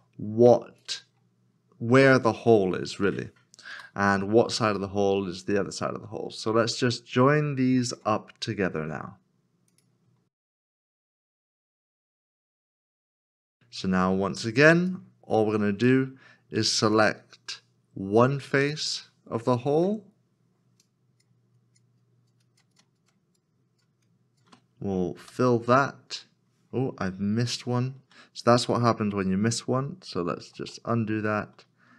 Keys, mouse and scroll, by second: 3.7 x, 7.8 1, 8.9 f, 10.5 shift+click, 10.6 f, 11.2 shift+click, 11.3 f, 11.9 shift+click, 12.1 f, 13.0 shift+click, 13.3 f, 14.7 f, 14.9 shift+l, 20.8 shift+l, 21.5 shift+click, 23.3 shift+click, 24.9 shift+click, 25.2 f, 30.4 ctrl+z.